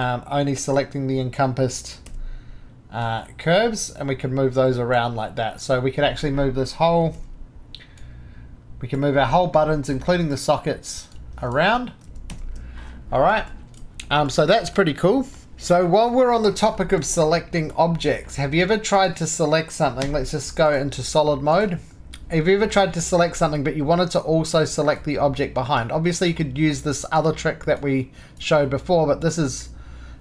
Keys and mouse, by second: 0.0-2.0 drag, 2.0 g, 3.0-5.5 drag, 5.6 Escape, 7.1 g, 8.0-9.9 drag, 9.9 drag, 11.1 click, 12.0 ctrl+z, 14.5 shift+middle drag, 14.8 shift+middle click, 15.0 middle click, 15.2 click, 16.8-18.4 shift+middle drag, 18.4-19.5 drag, 20.0 4, 20.7 click, 21.6-22.7 drag, 22.9-27.0 drag, 27.0-30.2 drag.